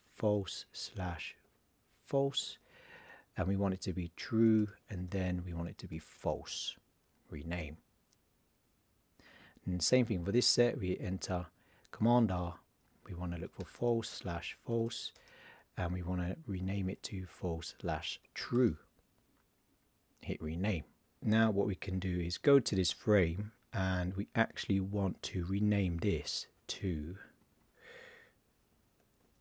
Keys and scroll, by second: 1.3 shift+f, 3.6 shift+t, 5.5 shift+f, 12.0 super+r, 13.2 shift+f, 14.2 shift+f, 16.1 shift+f, 18.0 shift+t, 29.0 shift+d.